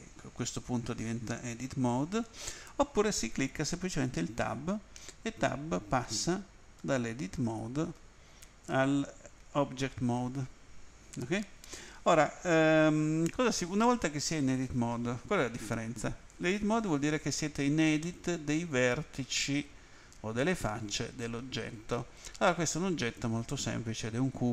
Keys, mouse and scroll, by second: 4.0 Tab, 6.0 Tab, 6.8 Tab, 7.3 Tab, 9.4 Tab, 10.2 Tab, 18.0 middle click.